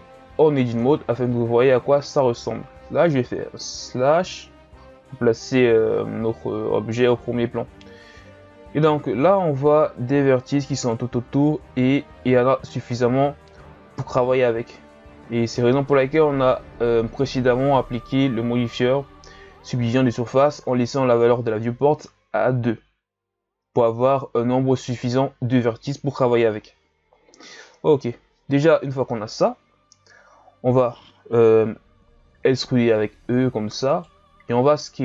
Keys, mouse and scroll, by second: 0.7 Tab, 4.2 KP_Divide, 5.8-6.4 ctrl+scroll up 3, 6.4-7.2 scroll up 3, 7.2-7.9 shift+scroll down 1, 7.9-8.7 ctrl+scroll up 1, 8.7-10.8 shift+scroll up 2, 10.8 alt+right click, 12.8-15.8 middle drag, 28.0 KP_1, 32.7 e.